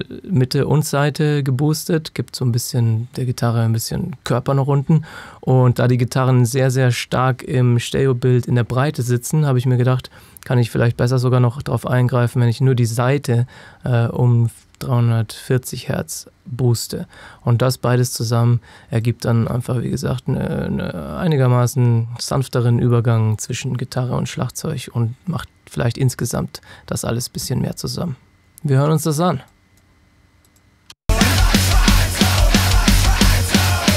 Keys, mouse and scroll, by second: 18.1 click, 29.5 click, 30.9 space, 31.9 click.